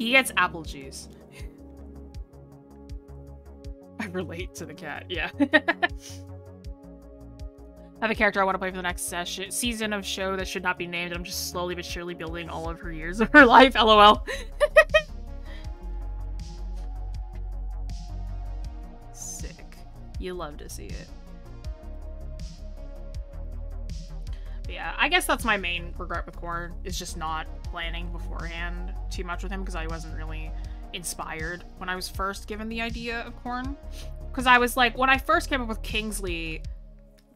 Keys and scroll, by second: 16.4 scroll down 1, 16.6 scroll up 1, 24.5 scroll down 1, 25.6-26.5 scroll up 1.